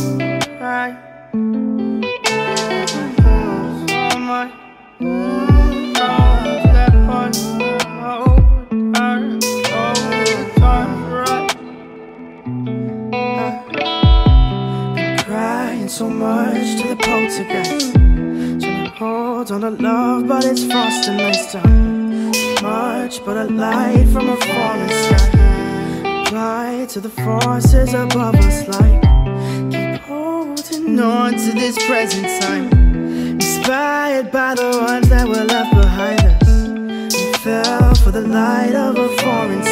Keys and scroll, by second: 10.8 ctrl+space.